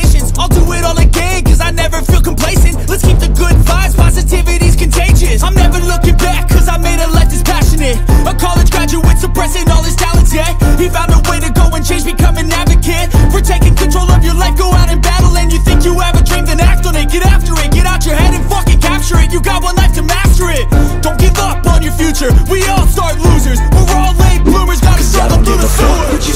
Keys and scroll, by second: 1.1 ctrl+t, 9.8 Down, 10.3 Up, 15.7 ctrl+t, 23.0 ctrl+t.